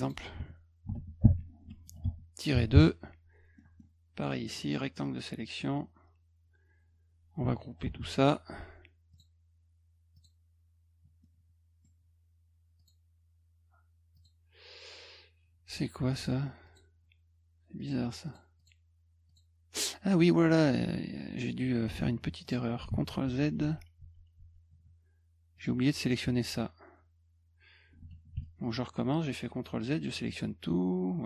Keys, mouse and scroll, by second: 0.0 click, 0.9 ctrl+v, 2.0 BackSpace, 3.6 middle click, 4.3-5.6 drag, 7.8 ctrl+g, 9.1 click, 10.1 click, 11.2 middle click, 12.8 click, 14.1 click, 16.1 click, 16.7 click, 17.8 click, 18.3 click, 18.6 click, 19.3 click, 22.4 click, 22.9 ctrl+z, 23.2 ctrl+z, 23.6 ctrl+z, 24.0 ctrl+z, 24.4 ctrl+z, 25.6 click, 28.4-29.8 shift+drag.